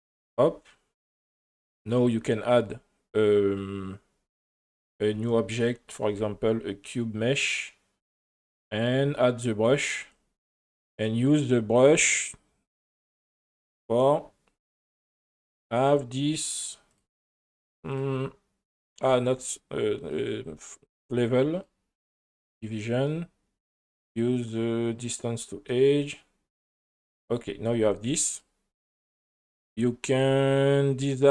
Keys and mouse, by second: 1.4 shift+middle click, 2.4 click, 4.9 click, 6.0 shift+a, 13.6 click, 14.6 click, 15.9 click, 16.4 click, 18.0 click, 20.0 click, 21.0 click, 21.5 click, 24.1-25.0 drag, 28.3 click, 29.0 click, 30.1 click.